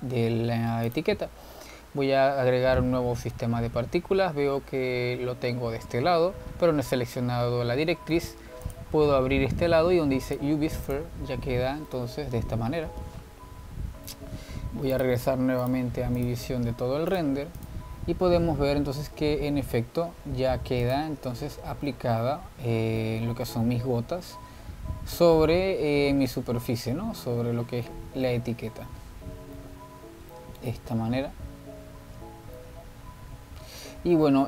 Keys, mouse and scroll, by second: 0.3 z, 1.2-2.0 middle drag, 2.0 click, 3.9-4.6 scroll up 10, 6.6 scroll down 4, 7.1-8.4 scroll down 6, 9.7-12.0 drag, 12.4-13.0 scroll up 2, 13.0-16.0 middle drag, 16.0 click, 16.4 shift+q, 17.3 click, 17.7 z, 19.5 click, 22.0 click, 22.3-22.7 scroll up 3, 23.1 middle click, 23.8-24.2 scroll down 2, 24.2-27.6 middle drag, 28.7 scroll down 2, 29.2-31.1 middle drag, 31.1-31.5 scroll down 1, 31.5 middle click, 32.1-32.6 scroll up 1, 32.6-33.2 scroll up 1, 33.2 scroll up 1, 33.4-33.7 scroll down 2, 33.7-34.4 middle drag.